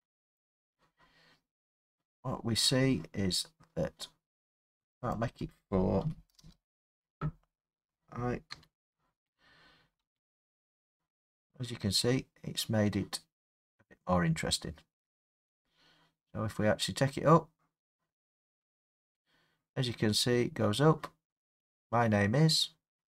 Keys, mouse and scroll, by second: 0.5 click, 5.2 click, 6.0 4, 6.4 Return, 7.2 4, 8.5 i, 9.8 space, 18.1 middle click.